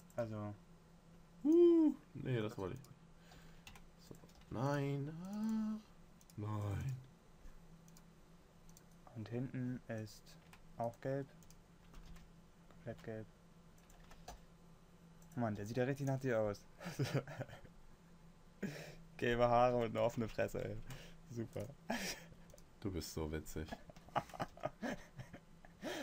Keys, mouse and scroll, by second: 0.6 g, 3.7 s, 4.8 g, 12.5 g, 14.6 s, 16.0 g, 24.1 s, 24.9 g.